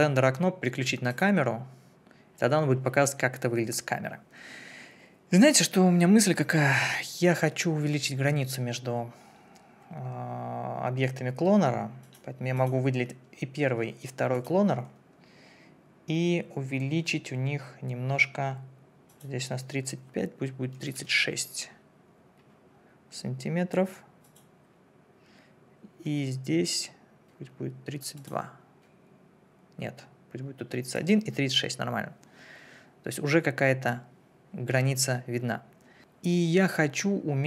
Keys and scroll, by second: 20.7 3, 20.9 6.